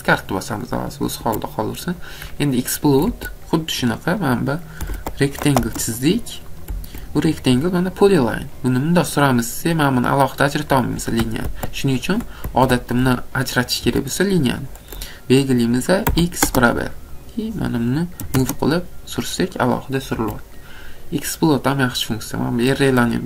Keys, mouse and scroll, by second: 0.7 scroll, 1.3 Escape, 2.1 click, 2.3 scroll, 2.8 Escape, 3.1 Escape, 4.6-5.4 typing, 6.1 click, 6.6 click, 6.8 Escape, 7.1 scroll down 3, 7.4 click, 10.1 click, 10.9 click, 11.5 ctrl+z, 12.4 ctrl+z, 13.8 Escape, 14.1 scroll down 2, 14.7 click, 15.1 click, 16.1 x, 16.2-17.2 scroll down 2, 17.2 click, 17.2 scroll, 18.2 m, 19.2 click, 19.7 click, 20.2 Escape, 20.4 scroll, 21.8 scroll, 22.5 click.